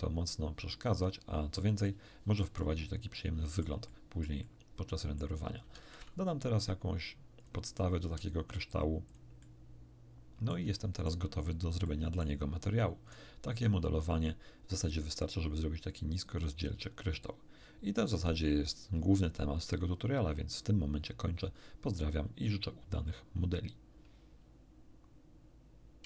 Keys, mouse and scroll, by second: 1.8-2.6 middle drag, 3.1-5.3 middle drag, 7.3 click, 7.9 s, 9.0 click, 10.6-11.2 shift+middle drag, 11.3 shift+scroll up 1, 11.8-12.3 shift+middle drag, 13.0 shift+right click, 14.9-18.2 middle drag.